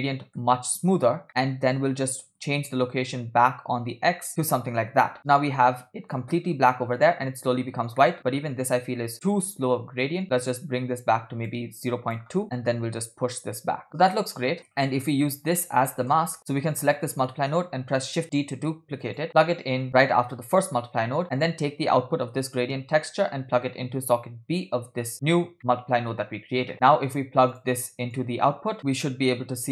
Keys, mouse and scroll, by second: 0.0-0.4 middle drag, 1.4 middle click, 1.7 scroll up 2, 2.8-4.6 shift+drag, 8.0 middle click, 9.1-11.5 shift+drag, 11.8-13.9 shift+drag, 12.4 middle click, 14.0 scroll down 2, 14.1 middle click, 14.6 scroll up 2, 15.6 click, 15.9 middle click, 16.4 x, 16.8 click, 17.7 shift+d, 21.0 middle click, 22.6-25.2 drag, 25.6-26.0 middle drag, 26.7 click, 26.7 middle click, 27.6 drag, 28.3 click, 28.8 middle click, 29.3 scroll up 3.